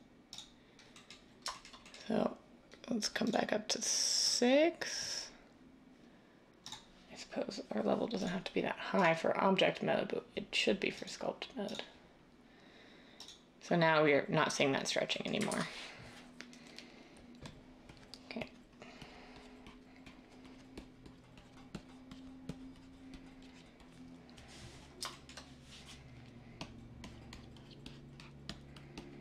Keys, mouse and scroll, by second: 15.5 ctrl+z.